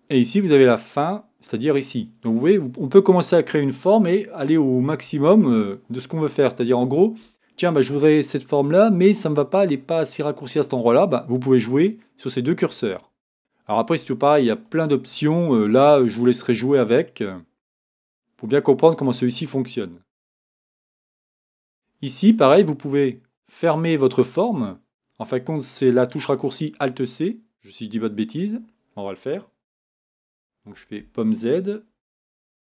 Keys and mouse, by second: 30.7 super+z.